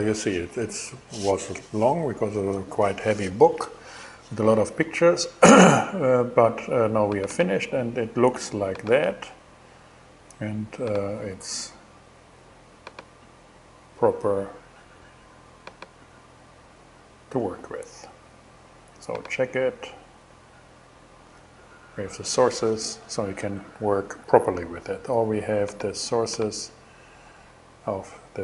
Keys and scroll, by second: 23.2 super+w.